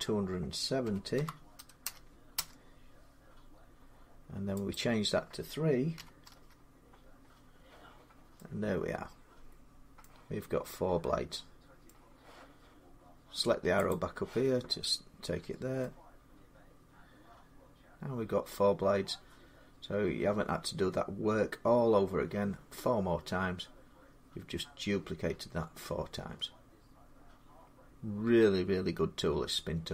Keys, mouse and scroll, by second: 0.7-2.0 typing, 2.2 Return, 3.7 typing, 4.6 click, 5.5-6.3 typing, 6.3 Return, 6.3-9.8 drag, 9.6 Return, 9.8-12.2 middle drag, 13.7 click, 15.2 Tab, 17.1-18.8 drag.